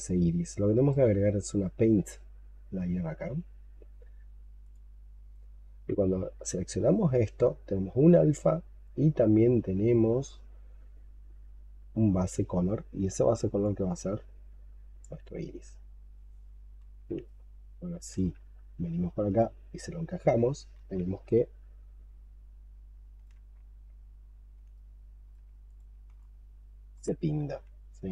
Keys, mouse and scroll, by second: 0.6 right click, 5.6-7.9 scroll down 12, 8.2-9.7 scroll down 8, 9.7-10.1 scroll down 2, 10.1 scroll up 2, 10.6-11.2 scroll down 3, 17.1 ctrl+right click, 20.6 ctrl+z, 21.2 ctrl+right click, 24.6 ctrl+right click, 26.1 alt+click, 27.3 ctrl+z, 28.0 alt+click.